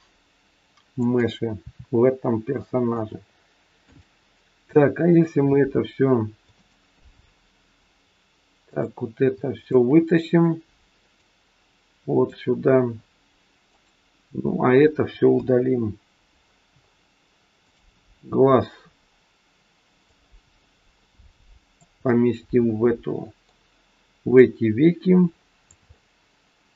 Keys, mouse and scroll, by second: 1.5 r, 3.8 click, 5.1 shift+click, 8.6 click, 9.6 click, 11.1 click, 12.9-13.6 scroll down 6, 13.6 click, 15.2 Delete, 16.6-17.6 scroll up 6, 17.6 click, 20.1 click, 22.0 middle click, 24.4 click, 25.9 middle click.